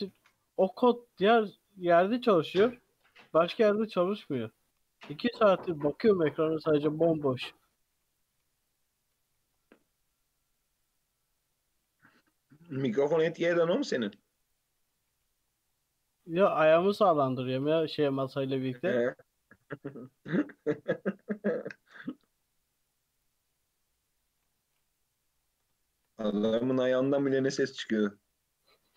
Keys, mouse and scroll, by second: 1.5-1.9 scroll up 3, 1.9 shift+middle click, 2.5 click, 3.8-4.1 scroll down 2, 4.1 2, 4.8 alt+click, 5.4-5.8 scroll down 1, 5.8 g, 7.4-8.0 scroll up 1, 8.0 3, 8.1 click, 8.5 x, 9.5 ctrl+z, 9.8 x, 11.3-11.8 scroll up 4, 11.8 1, 12.3 shift+click, 12.6 shift+middle click, 13.2-14.4 scroll down 1, 14.4 click, 14.8 Tab, 14.9-15.7 scroll down 5, 15.1 alt+z, 15.7-16.1 scroll up 3, 16.1 scroll down 2, 16.4-17.3 middle drag, 17.3-17.6 scroll down 2, 17.6-19.0 middle drag, 19.0 alt+z, 19.4-20.2 middle drag, 20.2 KP_3, 21.0-22.2 scroll up 3, 22.2-23.2 scroll down 4, 23.2 click, 23.6-23.9 scroll up 1, 23.9-24.5 middle drag, 24.5-25.0 scroll down 1, 25.0 KP_3, 25.4-25.8 scroll up 2, 25.8-26.1 shift+middle drag, 26.1-26.8 scroll up 2, 26.8 click, 27.2-28.0 middle drag, 28.0 g.